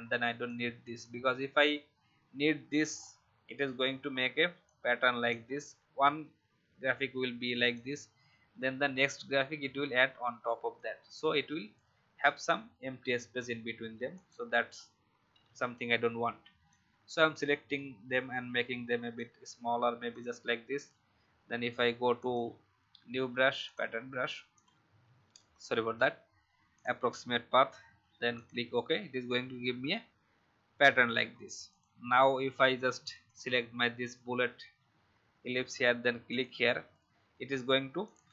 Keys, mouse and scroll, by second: 2.8 scroll up 1, 4.1-4.6 alt+scroll down 1, 4.6 click, 7.7-11.1 alt+drag, 12.3 click, 15.3 Delete, 16.7 click, 19.1 shift+click, 22.2-27.8 drag, 33.2 click.